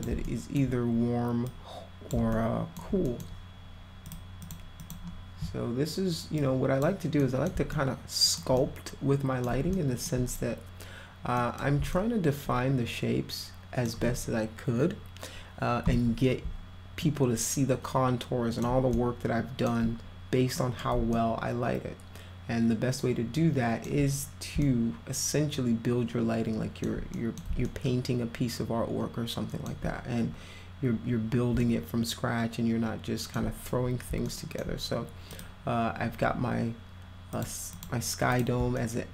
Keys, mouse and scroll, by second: 0.3 alt+middle click, 1.5 click, 2.3 alt+middle click, 3.1 middle click, 4.1 click, 4.4 click, 4.8 click, 6.4 click, 7.2 middle click, 7.7 alt+middle click, 8.6-9.4 middle drag, 9.7 alt+middle click, 11.4 middle click, 11.9-13.8 alt+middle drag, 17.0-18.6 alt+middle drag, 19.0-19.7 alt+middle drag, 20.6 middle click, 21.2-23.9 alt+middle drag, 24.6-26.9 alt+middle drag, 27.2 middle drag, 27.7-29.7 alt+middle drag, 31.6-33.3 alt+middle drag, 34.3 alt+middle click, 35.3 click, 37.3 click, 37.7 click, 38.3 click, 38.8 alt+middle click.